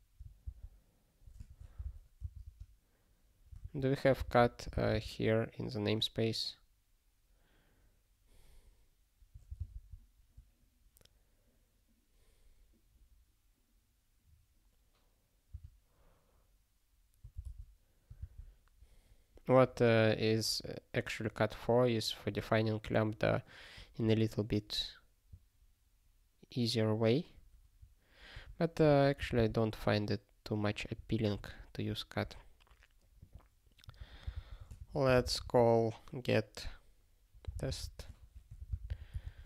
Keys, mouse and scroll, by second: 1.4 (, 2.4 space, 3.6 alt+s, 4.1 ctrl+b, 4.4 ctrl+b, 5.4 ctrl+d, 15.5 q, 28.3 ctrl+g, 29.3 super+b, 31.4 ctrl+a, 33.1 click, 33.9 ctrl+a, 34.3 ctrl+p, 34.6 Tab, 34.8 (, 35.0 g, 37.8-39.4 typing.